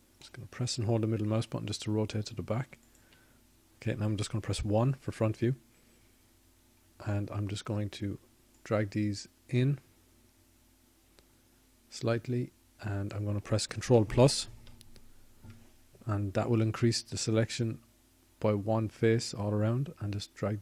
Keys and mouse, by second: 4.1 middle click, 5.6-6.7 middle drag, 9.1-10.4 middle drag, 10.4 KP_1.